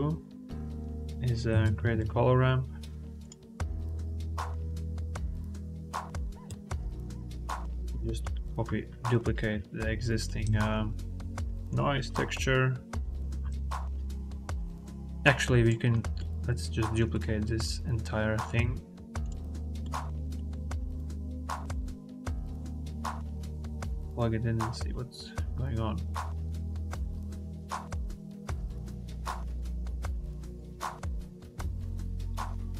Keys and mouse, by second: 4.8 click, 5.3 shift+a, 8.1 click, 9.8 click, 10.3 shift+d, 13.5 ctrl+z, 14.3 click, 15.3 click, 16.0 click, 17.4 click, 18.2 click, 18.5 shift+d, 19.8 click, 20.8 click, 21.9-22.8 drag, 23.2 click, 23.7-24.6 drag, 27.7-29.1 drag, 29.6 click, 29.9 click.